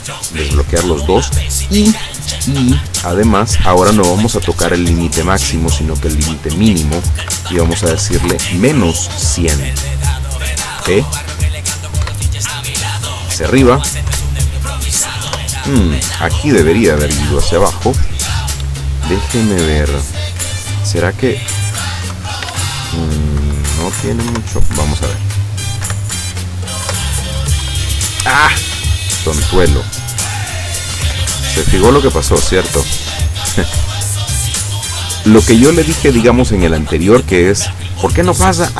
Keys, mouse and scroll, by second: 0.3 click, 2.7 click, 3.5 click, 6.0 click, 7.3 KP_Subtract, 7.6 KP_1, 7.9 KP_0, 8.3 KP_Enter, 10.9 p, 12.1 Up, 14.2 Down, 15.4 Down, 17.1 Escape, 21.0 click, 22.1 KP_0, 22.6 shift+Tab, 23.4 KP_Subtract, 23.8 KP_1, 24.0 KP_0, 24.4 KP_Enter, 25.9 p, 27.0 Down, 27.7 Down, 30.1 click, 31.0 KP_0, 31.2 Tab, 32.0 KP_Subtract, 32.3 KP_1, 32.5 KP_0, 32.7 KP_Enter, 34.6-36.3 drag.